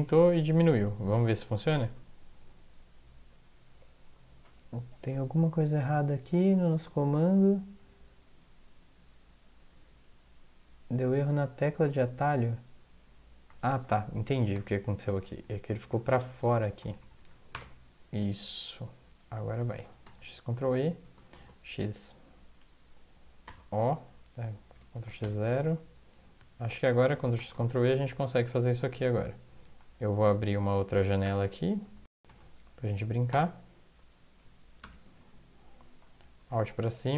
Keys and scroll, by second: 1.5 ctrl+x, 1.8 ctrl+e, 6.3 Left, 7.8 Down, 9.3 typing, 15.1 ctrl+Left, 15.3 ctrl+Left, 15.4 ctrl+Left, 15.7 ctrl+Right, 15.9 ctrl+Right, 16.5 ctrl+Left, 17.0 Left, 17.2 Left, 17.5 BackSpace, 19.8 ctrl+x, 20.0 ctrl+e, 21.3 ctrl+x, 23.5 o, 24.9 ctrl+x, 25.2 0, 27.1 ctrl+x, 27.4 ctrl+e, 30.1 Down, 30.3 Down, 31.2 ctrl+\, 31.8 Down, 32.0 Down, 32.2 Up, 33.3 -, 34.8 ctrl+\, 36.2 alt+Down, 36.5 alt+Down.